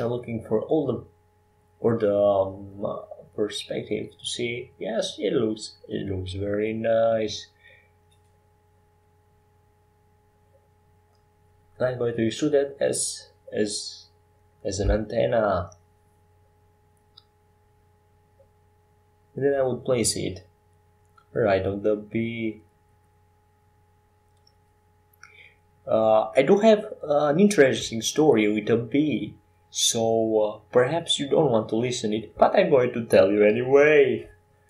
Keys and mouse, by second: 1.0 KP_7, 4.5-6.3 drag, 6.3 shift+a, 7.5 s, 8.7 s, 12.1 s, 14.2 Tab, 17.1-19.8 right drag, 19.8-23.2 typing, 27.5 e, 30.9-33.7 drag.